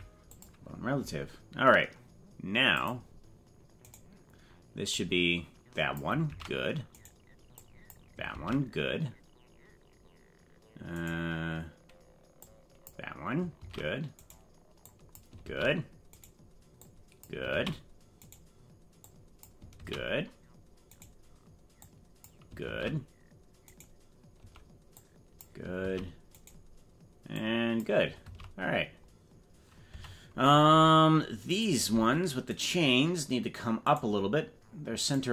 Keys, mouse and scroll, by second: 2.8 click, 3.9 right click, 5.0-6.0 drag, 6.4 ctrl+z, 7.0 right click, 7.5 click, 8.5 ctrl+z, 11.1 right click, 12.4 click, 13.8 ctrl+z, 14.3 right click, 14.8 click, 15.6 ctrl+z, 16.2 right click, 16.7 click, 17.7 ctrl+z, 18.3 right click, 19.0 click, 19.9 ctrl+z, 21.0 right click, 21.7 click, 22.8 ctrl+z, 23.7 right click, 24.9 click, 26.0 ctrl+z, 26.4 right click, 27.3 click, 28.4 ctrl+z, 29.9 Tab, 31.5 right click, 32.5 shift+right click, 33.9 right click, 35.1 right click.